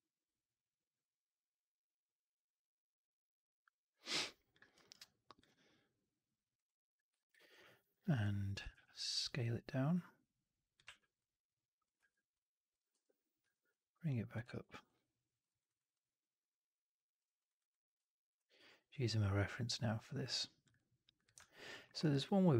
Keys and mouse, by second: 4.5 alt+right click, 4.7 alt+right click, 4.9 alt+click, 7.9 alt+middle click, 8.1 alt+click, 10.2 click, 10.7 w, 11.9 r, 12.8 4, 13.3 w, 14.4 alt+right click, 14.6 alt+right drag, 14.8 alt+click, 15.3 alt+right drag, 15.6 alt+right click, 15.8 click, 17.3 alt+right click, 17.5 alt+right drag, 20.5 click, 21.7 alt+middle click, 21.9 alt+right click, 22.1 alt+click.